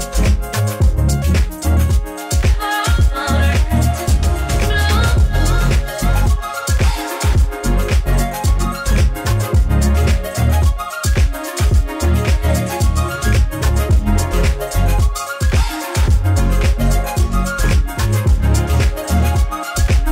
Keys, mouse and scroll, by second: 10.6 click, 18.1 click.